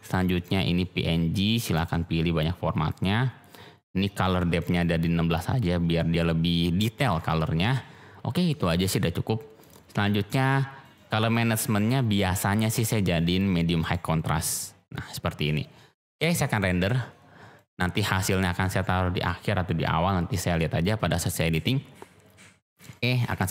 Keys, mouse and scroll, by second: 4.6 click, 6.9 click, 9.5 click, 10.8 click, 12.6-14.0 drag, 17.6-23.5 drag.